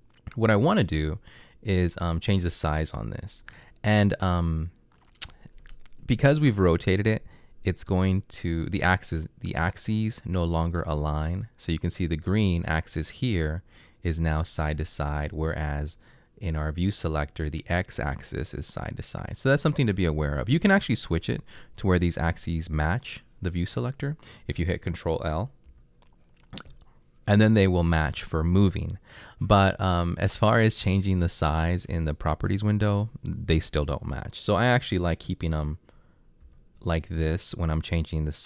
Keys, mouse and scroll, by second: 25.7 ctrl+l, 36.5 ctrl+l.